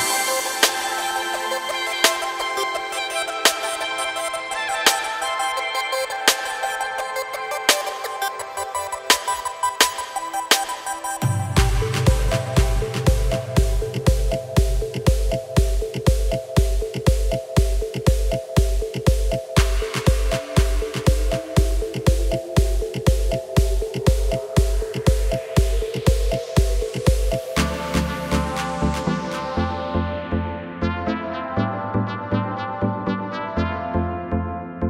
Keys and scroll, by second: 10.4 shift+e, 21.6 ctrl+z, 24.8 shift+e, 30.0 Tab.